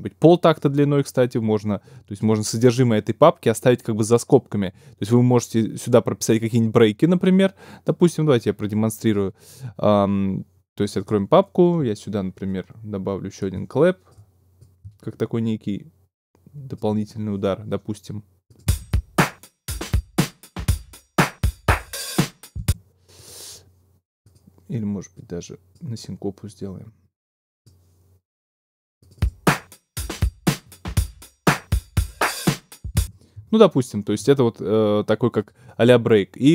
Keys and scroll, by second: 18.6 space, 22.6 space, 32.9 space.